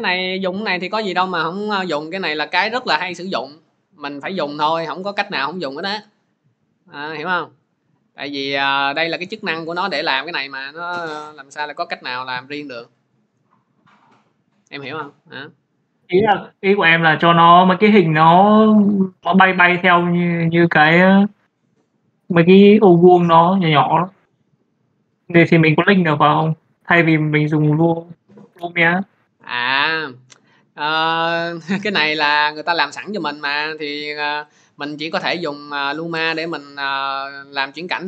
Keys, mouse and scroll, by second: 0.7 click, 6.1-11.2 drag, 31.7-33.0 drag.